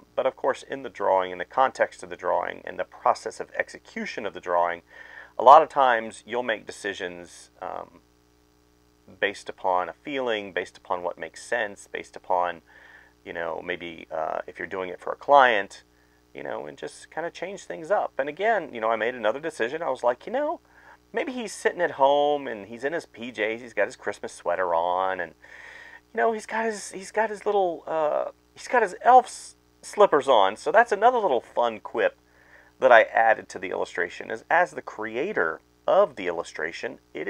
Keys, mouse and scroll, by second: 1.2 space, 5.2 space, 6.5 space, 6.9 space, 8.7 space, 9.3 space, 9.9 ctrl+z, 10.4-17.8 typing, 10.8 ctrl+z, 18.8 ctrl+z, 19.0 ctrl+z, 19.7-25.7 typing, 19.8 ctrl+z, 26.3 ctrl+z, 26.7 ctrl+z, 26.8 space, 27.6 space, 28.6 space, 28.9 space, 29.2 space, 30.8-32.6 typing, 33.2 ctrl+z, 33.6-36.5 typing.